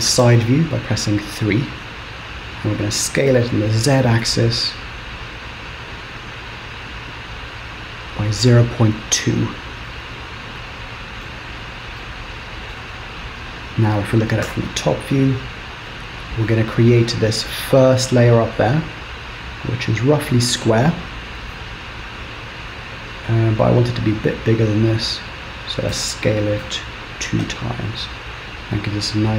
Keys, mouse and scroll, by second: 0.3-1.2 scroll up 4, 2.8 s, 11.4 middle click, 12.1 middle click, 13.0-13.6 scroll down 5, 13.6-14.5 scroll up 2, 14.5 KP_7, 15.0-15.4 scroll down 2, 15.4 scroll up 2, 22.8 scroll up 2, 23.2 scroll down 2, 24.1-24.6 scroll down 2, 24.6-25.8 scroll up 3, 26.0 s, 28.0 middle click.